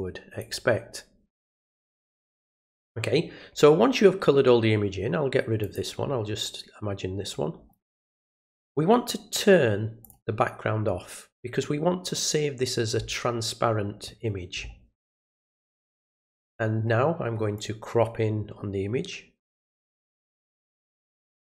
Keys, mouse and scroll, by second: 0.4 click, 1.9 click, 5.6 click, 10.0 click, 15.6 click, 17.5-20.1 drag, 21.2 click.